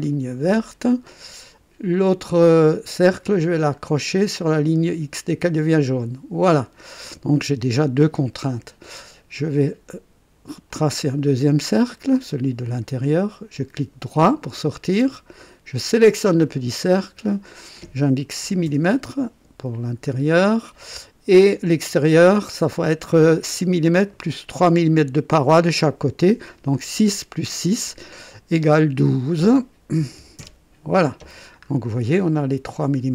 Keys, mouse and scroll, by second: 0.1 click, 5.7 click, 10.6 click, 12.1 click, 13.0 right click, 15.7 click, 17.3 click, 18.4 KP_6, 18.7 Return, 20.0-20.4 scroll up 1, 21.4 click, 29.0 click, 30.0 KP_1, 30.2 KP_2, 30.3 Return, 31.6-32.0 scroll up 1.